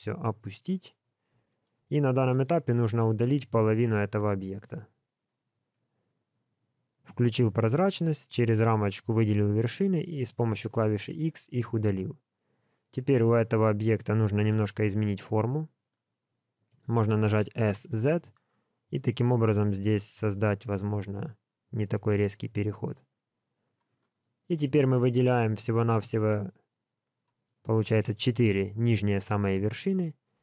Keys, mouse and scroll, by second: 1.1-1.5 scroll up 3, 1.5 shift+middle click, 2.3 alt+z, 3.4 alt+a, 4.6 b, 11.0 middle click, 13.4 b, 14.4 KP_1, 17.4 s, 24.2 scroll up 2, 25.0 alt+a, 25.8 b, 27.4 middle click, 29.4 KP_1, 30.1-30.4 scroll down 3.